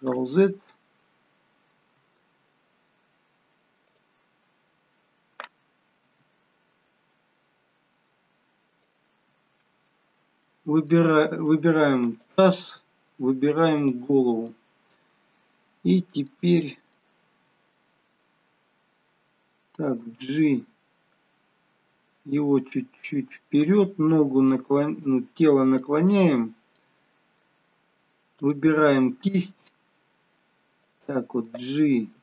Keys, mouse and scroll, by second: 1.3 ctrl+z, 3.9 click, 6.1 r, 9.9-10.5 scroll down 1, 10.5 middle click, 12.3 click, 13.9 shift+click, 14.6 middle click, 16.6 scroll down 1, 17.1 middle click, 24.6 middle click, 25.3-25.8 scroll down 2, 25.8 middle click, 26.4-26.9 scroll up 2, 26.9 middle click, 28.5 click, 29.4 g.